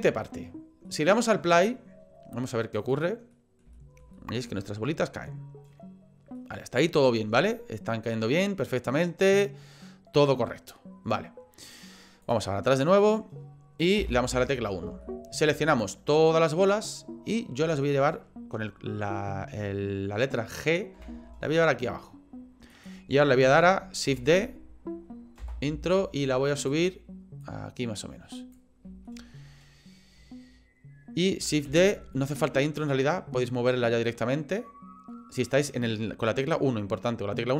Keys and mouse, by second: 0.9 middle click, 2.8 click, 3.5 middle click, 3.9 shift+middle click, 4.3 middle click, 5.1 middle click, 6.5 middle click, 7.9 middle click, 11.7 click, 12.7 middle click, 14.0 KP_1, 15.0 shift+middle click, 15.8 click, 17.8 shift+middle click, 21.0 g, 24.1 shift+d, 26.6 click, 27.4-28.5 drag, 29.1 shift+middle click, 31.7 shift+d.